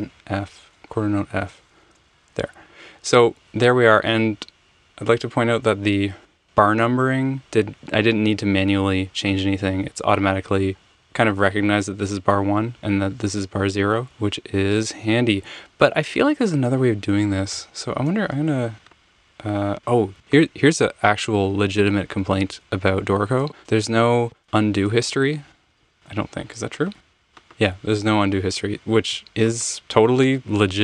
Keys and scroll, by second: 1.8 Return, 1.9 f, 2.6 Escape, 17.5 BackSpace, 21.5 super+z, 22.4 super+z, 23.0 super+z, 25.7 super+z, 27.9 super+z, 28.4 super+z.